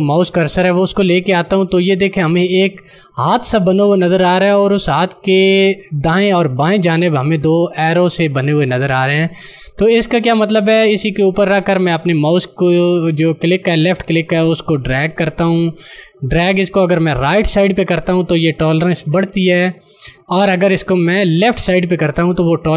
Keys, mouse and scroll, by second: 12.1 click.